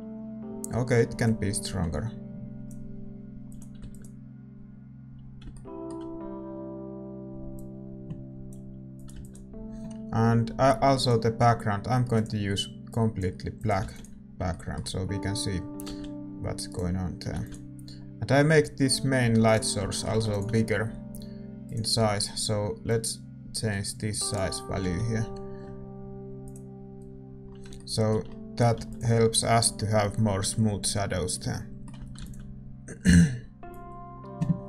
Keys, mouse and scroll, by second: 2.5-7.0 drag, 3.9 ctrl+s, 7.0-9.1 middle drag, 9.1 ctrl+s, 9.1-15.9 drag, 13.9 ctrl+s, 15.9-19.2 middle drag, 15.9 shift+z, 19.2 a, 19.8-26.2 drag, 19.8-26.2 middle drag, 26.2 shift+z, 28.0 click, 28.0-34.6 middle drag, 28.7 ctrl+s, 32.2 ctrl+s.